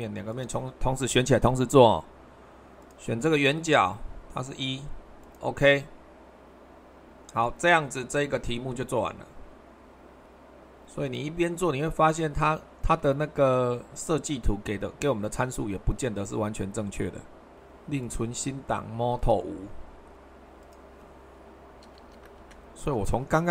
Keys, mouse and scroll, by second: 2.8-3.9 drag, 5.2-6.3 drag, 6.6-10.2 middle drag, 11.1-12.1 drag, 13.5 super+1, 15.8 super+2, 22.0 BackSpace, 22.4 Return.